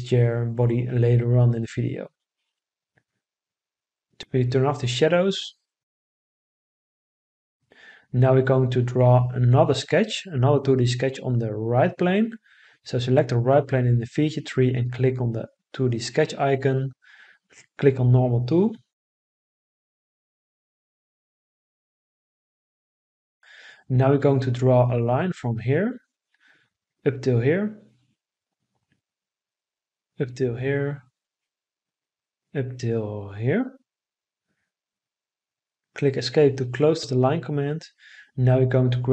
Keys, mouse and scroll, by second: 37.6 Escape.